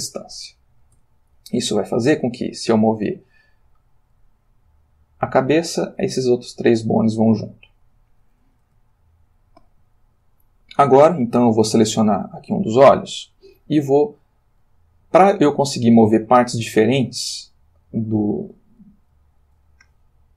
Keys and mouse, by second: 1.0 Tab, 1.7 click, 3.2 r, 7.2 Escape, 8.9-9.9 ctrl+middle drag, 11.2 click, 14.5 g, 17.8 Escape.